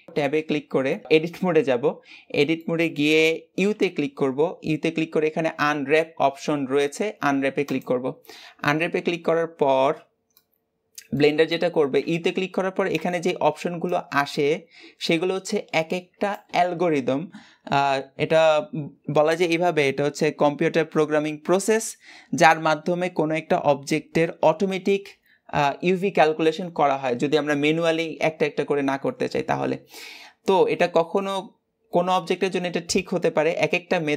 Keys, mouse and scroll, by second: 0.2 a, 0.7-1.9 middle drag, 1.9-2.4 scroll up 2, 2.4-7.6 shift+middle drag, 10.2-11.2 middle drag, 11.2-16.0 scroll down 1.